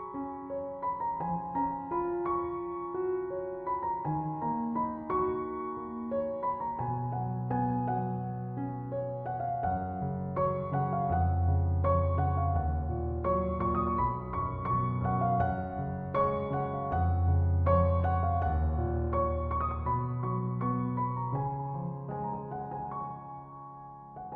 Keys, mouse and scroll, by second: 1.0 Escape, 7.7 Escape, 12.9 Escape.